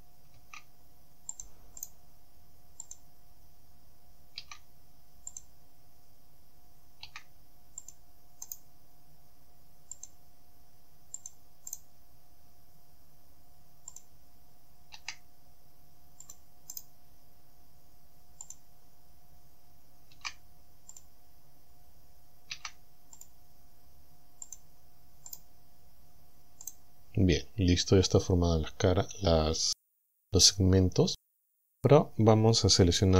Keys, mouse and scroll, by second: 1.4 shift+click, 1.8 shift+right click, 2.9 click, 5.4 shift+click, 7.8 shift+click, 8.5 right click, 10.0 click, 11.2 click, 11.8 right click, 14.0 click, 16.3 shift+click, 16.8 shift+right click, 18.5 click, 21.0 shift+click, 23.2 shift+click, 24.5 click, 25.3 right click, 26.7 right click.